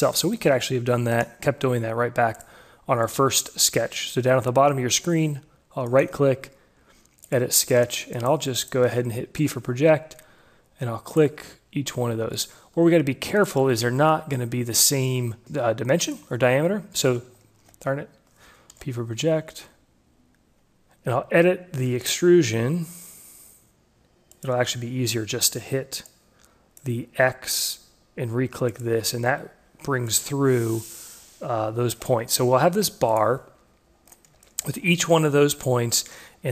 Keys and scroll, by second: 9.5 p, 15.4 p, 17.6 ctrl+z, 19.1 p.